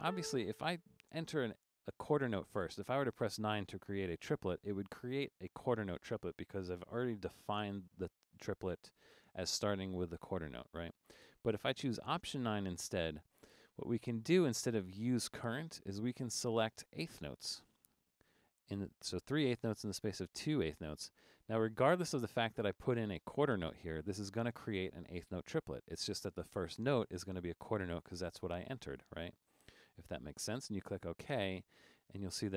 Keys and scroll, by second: 0.0 a, 12.1 alt+9.